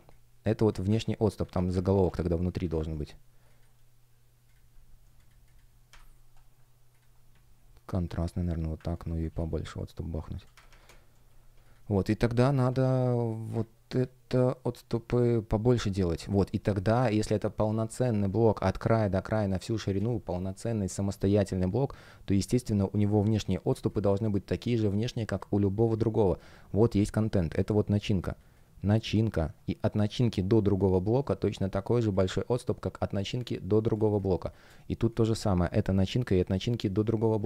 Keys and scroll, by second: 0.9 super+z, 1.9 super+x, 2.5 super+v, 3.4 shift+Return, 5.8 Up, 9.1 shift+Return, 10.5 shift+Up, 11.2 shift+Up, 16.4 alt+shift+l, 19.9 super+z, 23.6 space, 33.8 space.